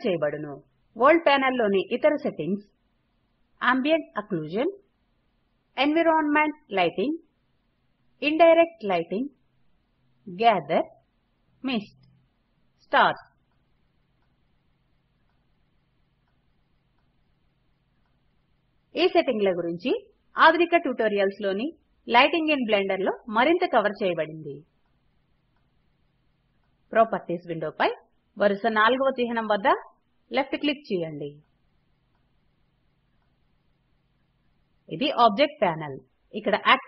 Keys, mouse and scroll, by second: 25.3 click.